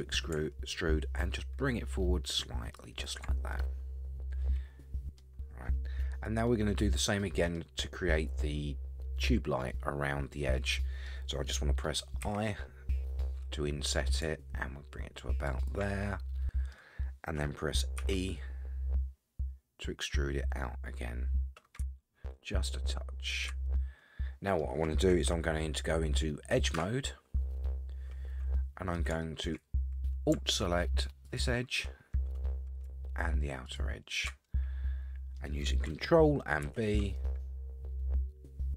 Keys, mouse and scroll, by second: 3.5-5.2 middle drag, 6.5-7.6 middle drag, 10.3 middle click, 12.2 i, 16.0 middle click, 18.0 e, 23.7 middle click, 26.7 2, 28.5 middle click, 29.2 shift+middle click, 29.7-30.0 scroll up 4, 31.2 alt+click, 33.6 alt+shift+click, 34.5 middle click, 36.6 ctrl+b.